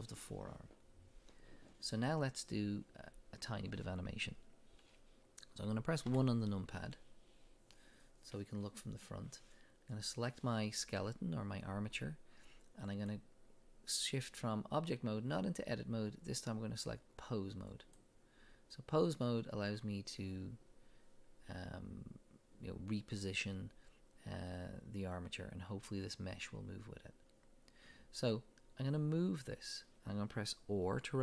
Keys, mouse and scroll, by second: 6.0 KP_1, 9.9 click, 12.9-31.2 drag.